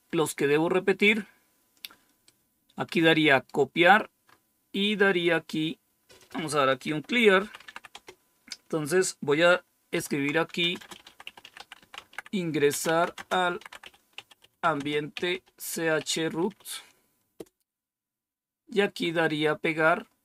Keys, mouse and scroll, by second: 2.1-3.4 right drag, 4.1-5.3 scroll down 2, 6.1 click, 6.5-8.0 typing, 6.9 click, 9.8-17.7 typing.